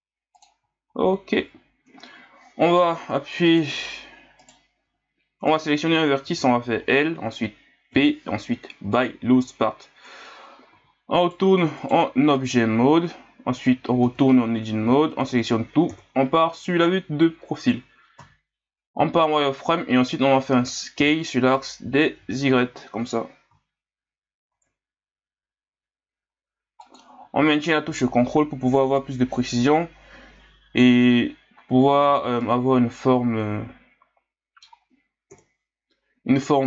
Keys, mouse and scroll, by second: 1.0 ctrl+scroll up 1, 3.5 right click, 4.4 right click, 4.8 l, 5.4 right click, 6.2 l, 7.9 p, 10.1 Tab, 10.7 z, 11.2 right click, 11.8 right click, 12.4 right click, 14.0 Tab, 14.9 a, 15.9 KP_3, 18.2 z, 21.0 s, 32.0 z, 32.4-35.3 middle drag, 35.3 KP_3.